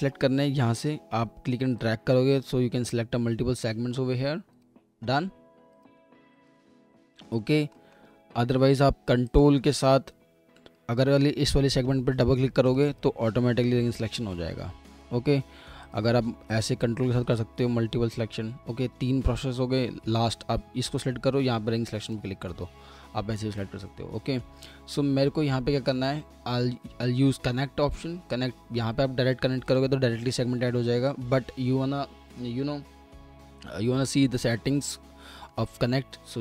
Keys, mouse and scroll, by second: 7.1 alt+middle click, 12.7 ctrl+click, 16.5 ctrl+click, 24.2 alt+middle click, 31.0 ctrl+z, 35.5 alt+middle click.